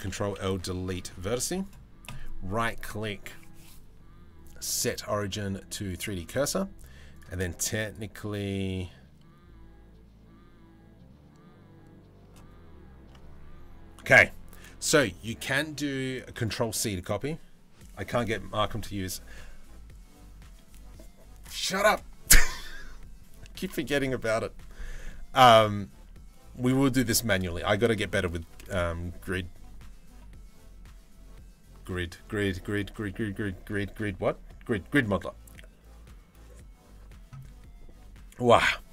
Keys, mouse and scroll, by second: 0.0 Delete, 1.0 Tab, 1.7-5.6 drag, 5.8 middle click, 7.4-12.0 drag, 24.6 middle click, 27.2 middle click.